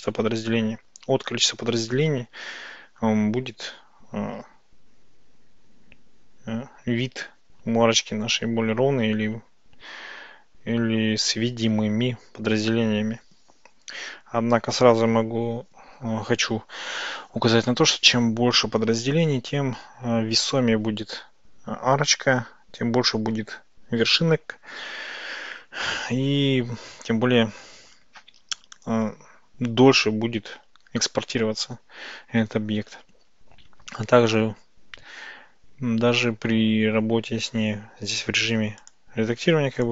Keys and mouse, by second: 38.9 click.